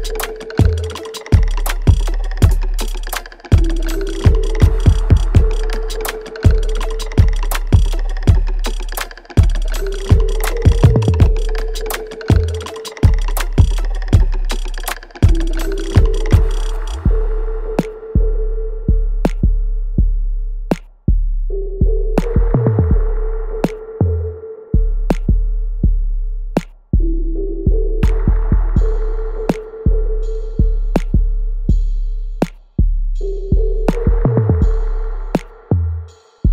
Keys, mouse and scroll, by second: 0.3 alt+right click, 0.8 click, 1.0 alt+click, 1.2 alt+middle click, 2.9 alt+right click, 3.3 alt+click, 4.0 alt+middle click, 4.9-7.3 alt+right drag, 7.8 alt+click, 8.5 alt+middle click, 8.8 alt+right click, 9.7-11.4 right drag, 11.4 click, 12.2 shift+click, 15.3 alt+right click, 15.8 alt+middle click, 16.4 alt+right click, 17.4 shift+click, 19.9 alt+right click, 20.3-22.0 alt+drag, 22.0 alt+right click, 22.7 alt+middle click, 23.2-25.3 alt+drag, 25.3 alt+right click, 25.9 alt+middle click, 26.4 alt+click, 26.9 alt+right click, 27.2 alt+click, 27.6 alt+middle click, 28.4-30.4 alt+drag, 30.4 alt+middle click, 30.9 alt+right click, 31.9 alt+click, 32.3 alt+middle click, 32.7 alt+right click, 34.0 click, 35.0-35.4 scroll down 1, 35.4 scroll up 1, 36.1 click.